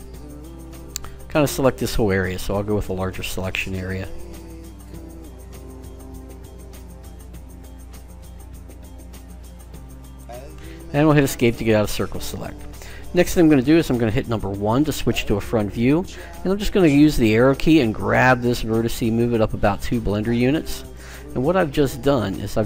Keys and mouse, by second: 15.1 KP_1, 21.6-22.6 middle drag.